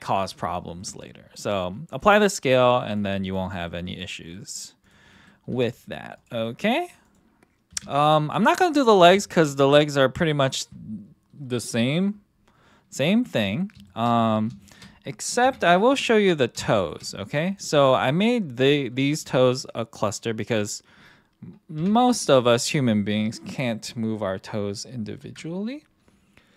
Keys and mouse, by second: 2.1-3.0 drag, 3.6-4.1 middle drag, 4.3 middle drag, 5.1 middle click, 5.5 r, 6.4 middle drag, 7.0 click, 7.7 KP_1, 9.2 shift+middle drag, 13.3-13.6 middle drag, 13.8 shift+middle drag, 14.2 middle click, 14.6 shift+middle drag, 15.4 KP_3, 16.7 shift+middle drag, 17.8 middle drag, 21.8 KP_3, 25.2 ctrl+..